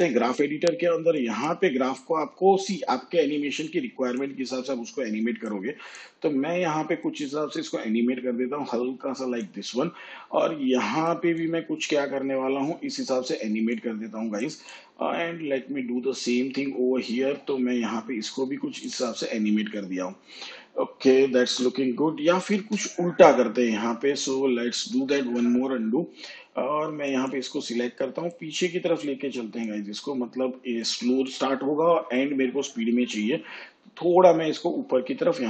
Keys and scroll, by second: 22.5 ctrl+z, 25.1 ctrl+z.